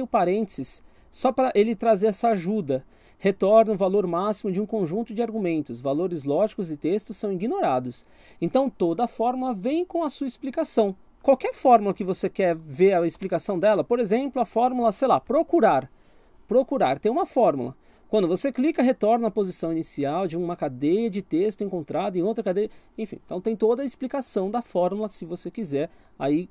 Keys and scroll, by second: 11.7 BackSpace, 14.6-15.9 typing.